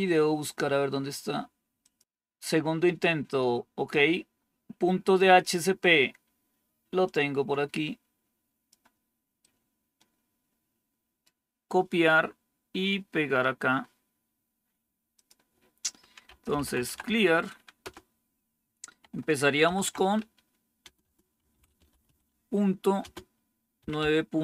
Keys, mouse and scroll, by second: 1.7 click, 2.0-2.6 scroll down 2, 2.6-3.9 scroll down 2, 3.9-6.2 scroll down 1, 6.2-6.9 scroll down 1, 6.9-8.6 drag, 9.3-11.1 right drag, 15.0 click, 15.9-17.3 typing, 17.7 Return, 19.3-24.4 typing.